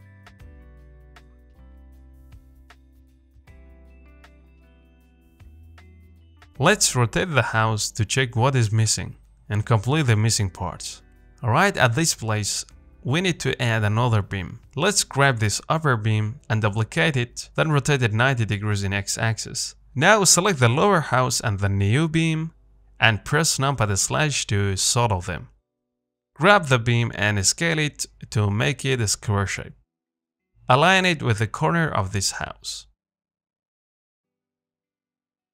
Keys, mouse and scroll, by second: 0.0-0.3 scroll down 2, 0.3 middle click, 0.7 scroll down 2, 1.0-4.0 middle drag, 4.0-4.3 scroll down 2, 4.3 shift+middle click, 5.0-5.4 scroll up 2, 5.4-8.3 shift+middle drag, 8.3 scroll up 1, 8.6 shift+middle click, 9.6-9.9 scroll up 2, 9.9 shift+middle click, 10.4 scroll up 1, 10.7-16.0 shift+middle drag, 16.0 click, 16.8 shift+d, 18.3 r, 22.4 shift+click, 23.1 KP_Divide, 23.7 KP_1, 24.9 click, 25.6 KP_7, 26.5 z, 27.2 Tab, 27.5 a, 27.9 s, 29.9 g, 33.0 scroll up 3, 33.3 shift+middle click, 33.7 z, 33.9 middle click, 34.8-35.3 scroll down 3, 35.3 s.